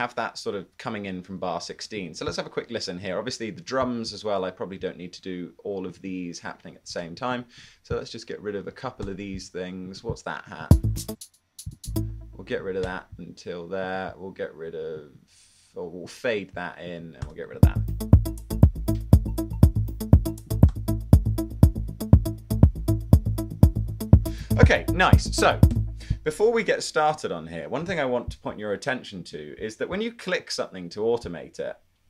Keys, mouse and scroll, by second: 1.9 1, 7.1 super+1, 9.1 BackSpace, 10.0 1, 10.6 space, 12.9 BackSpace, 17.3 BackSpace, 17.5 space, 20.8 BackSpace.